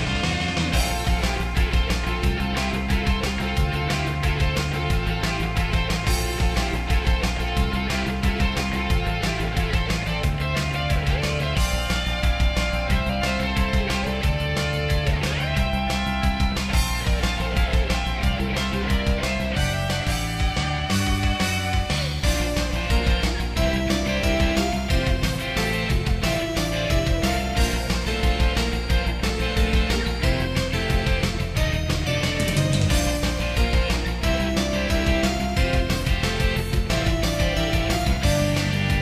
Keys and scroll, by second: 1.0 ctrl+z, 2.1 ctrl+z, 3.1 ctrl+z, 4.6 ctrl+z, 5.3 ctrl+z, 8.0 ctrl+s, 10.4 ctrl+z, 11.1 ctrl+z, 11.4 ctrl+z, 13.8 ctrl+z, 15.4 ctrl+z, 16.1 ctrl+z, 16.7 ctrl+z, 17.0 ctrl+z, 19.0 ctrl+z, 19.3 ctrl+z, 19.6 ctrl+z, 20.5 ctrl+z, 20.9 ctrl+z, 21.3 ctrl+z, 22.2 ctrl+z, 22.9 ctrl+z, 23.5 ctrl+z, 24.4 ctrl+z, 25.1 ctrl+z, 25.4 ctrl+z, 26.8 ctrl+z, 27.2 ctrl+z, 27.9 ctrl+z, 28.1 ctrl+z, 28.4 ctrl+z, 28.8 ctrl+z, 29.7 ctrl+z, 30.7 ctrl+z, 31.3 ctrl+z, 32.8 ctrl+z, 33.9 ctrl+z, 34.6 ctrl+z, 35.0 ctrl+z, 35.9 ctrl+z, 36.2 ctrl+z, 37.4 ctrl+z, 37.8 ctrl+z, 38.6 ctrl+z, 38.9 ctrl+z.